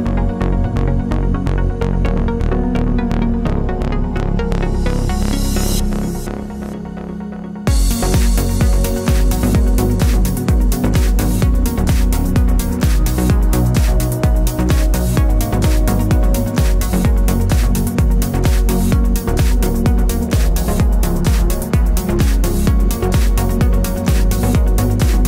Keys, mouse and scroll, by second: 0.0 Tab, 3.3 Tab, 4.6 click, 4.7 Tab, 6.6 r, 7.3 KP_Enter, 7.7 s, 10.4 click, 10.6-13.7 middle drag, 11.4 g, 13.7 click, 14.4 middle click, 14.9 3, 15.0 click, 15.6-17.8 middle drag, 15.8 g, 17.8 click, 19.1 shift+a, 20.6 s, 21.5 click, 21.6 g, 22.4 click, 22.6-25.2 middle drag, 23.6 Tab.